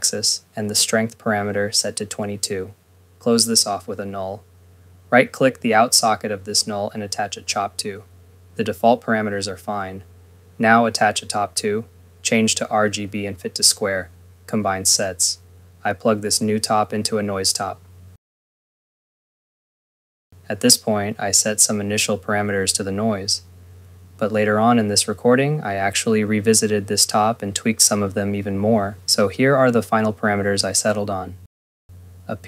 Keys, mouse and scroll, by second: 3.3 right click, 4.1 Return, 4.4 click, 4.7 click, 5.1 ctrl+s, 5.4 scroll, 5.6 click, 6.0 scroll, 6.4 right click, 7.2 click, 10.7 right click, 11.7 click, 16.3 ctrl+s, 16.5 right click, 16.8-18.0 typing, 18.1 click, 20.0 click, 21.5-22.1 scroll, 23.1 click, 23.4-24.3 typing, 24.4 Return, 24.9 click.